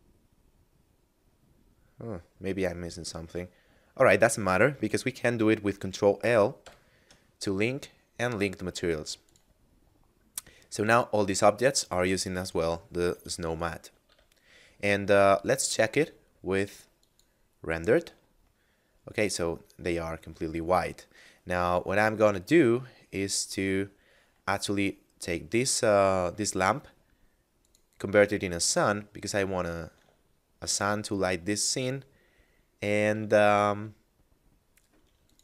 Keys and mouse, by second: 9.2 click, 10.9 right click, 14.0 a, 15.8 click, 20.3 middle click, 23.3 right click, 25.2 middle click, 27.5 click, 30.3 shift+middle click, 32.2 middle click, 33.4 r, 33.7 z, 35.3 click.